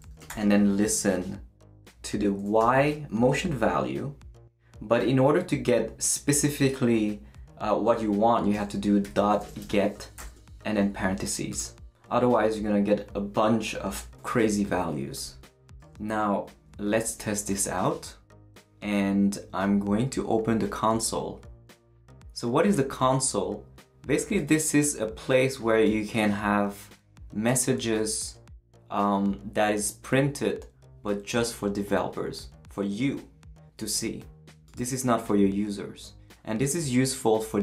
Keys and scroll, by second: 0.0-0.8 typing, 2.6 y, 8.8-10.2 typing, 17.0 super+s.